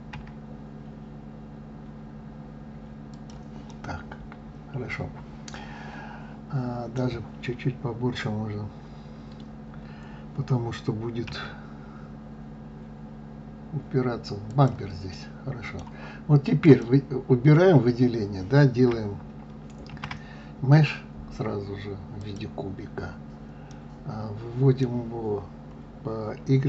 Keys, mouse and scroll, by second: 3.6-6.6 middle drag, 11.2 s, 15.0-16.5 middle drag, 16.5 click, 17.7-19.8 scroll down 2, 19.8 shift+a, 23.6-26.6 middle drag.